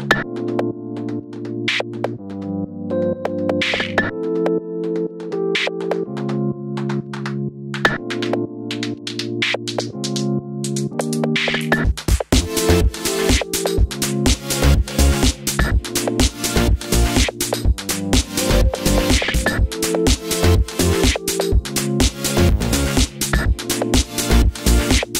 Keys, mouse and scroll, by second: 0.0 z, 8.6-9.1 scroll down 2, 9.1 click, 12.9 m, 14.9 click, 15.5-22.4 middle drag, 22.4 KP_1.